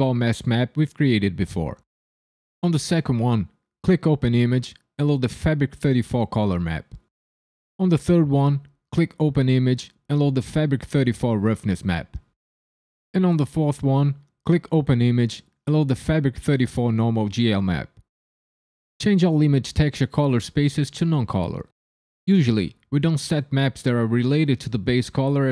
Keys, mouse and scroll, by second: 3.8 click, 8.7 click, 14.4 click, 19.7 click, 22.4 click, 25.2 click.